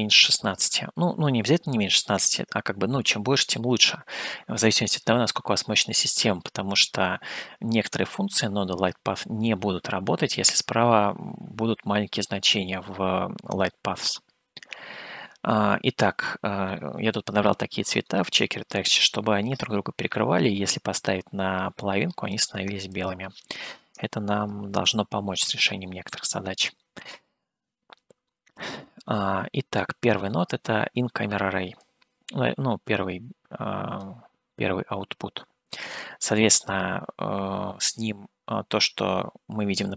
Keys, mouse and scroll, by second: 15.7-16.8 middle drag, 17.2 scroll down 2, 18.0 middle click, 19.6-22.5 drag, 23.1-25.2 drag, 26.0-27.2 middle drag, 28.5-30.4 middle drag, 31.8-34.0 drag, 35.8-36.2 scroll up 2, 37.4 scroll up 1.